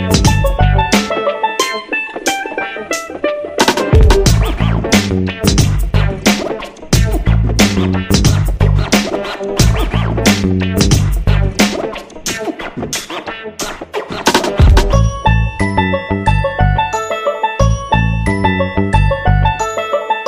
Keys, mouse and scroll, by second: 1.8 click, 4.4-8.0 drag, 8.5 click, 9.2 shift+click, 10.0 click, 11.7 shift+click, 13.6 click, 16.7 click, 20.0-20.2 drag.